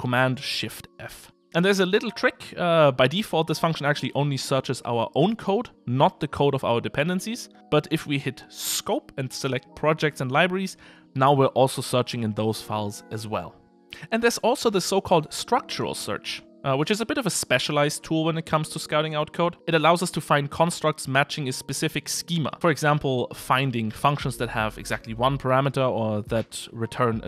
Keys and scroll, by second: 0.2 shift+super+f, 23.8 typing.